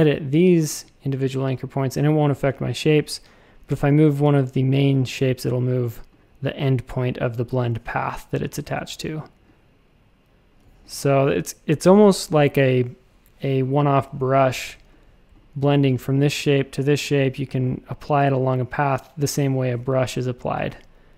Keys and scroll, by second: 8.6 shift+c, 10.6 a, 10.9 space, 14.5 a.